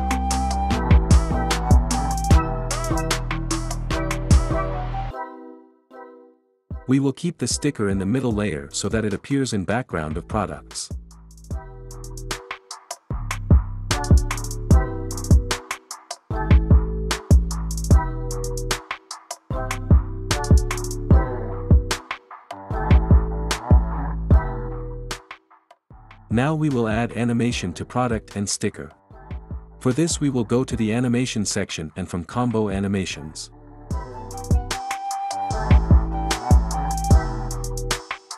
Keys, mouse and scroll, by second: 3.9 click, 11.5 ctrl+scroll, 13.6 click, 16.8 click, 22.9 click, 25.0 click, 28.1 click.